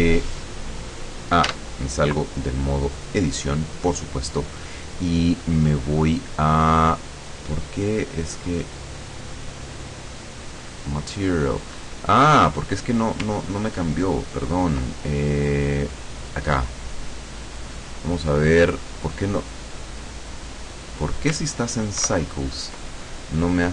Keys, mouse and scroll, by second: 1.5 Tab, 3.0 click, 4.1-4.4 scroll down 1, 4.9 scroll up 2, 6.0-6.3 scroll down 2, 8.5 click, 9.3 click, 10.9-12.1 drag, 16.4 click, 22.1 ctrl+Right.